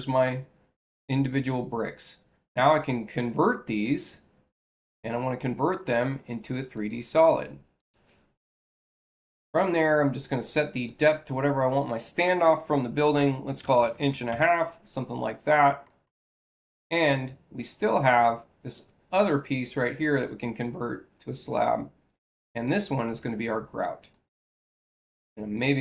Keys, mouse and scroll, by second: 3.7 click, 5.0 6, 6.6 click, 7.6 click, 10.7 click, 15.7 space, 17.7 click, 20.1 click, 22.5 click, 24.0 click.